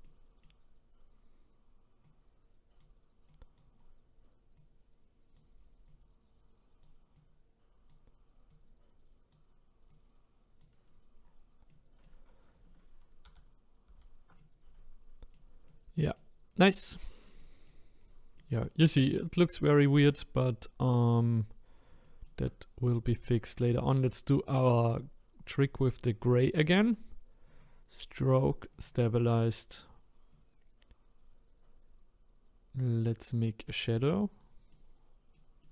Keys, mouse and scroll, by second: 0.1-2.0 middle drag, 2.0-3.8 drag, 3.8-4.5 scroll down 1, 4.5-11.2 drag, 11.2-11.7 scroll down 5, 11.7-13.2 middle drag, 13.2 ctrl+z, 13.9 ctrl+z, 14.4-16.5 middle drag, 16.5-17.4 scroll up 1, 17.4 middle click, 18.0-18.3 scroll down 1, 18.3-19.4 middle drag, 19.4-20.1 scroll up 1, 20.1-21.2 drag, 21.6-22.0 scroll up 3, 22.0 shift+middle click, 22.6-25.1 scroll up 1, 25.1-33.4 drag, 34.7-35.7 middle drag.